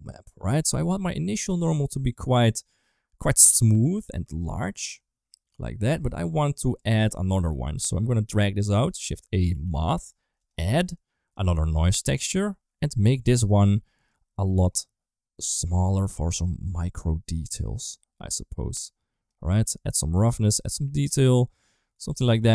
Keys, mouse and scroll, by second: 0.4 middle click, 1.5-3.7 drag, 4.6-5.7 drag, 6.5 click, 7.3 click, 7.8 click, 8.9 shift+a, 11.2 click, 11.4 shift+d, 12.3 click, 13.1 middle click, 14.0-16.3 drag, 17.3-19.2 drag, 19.9 click, 20.5 click, 22.4 middle click.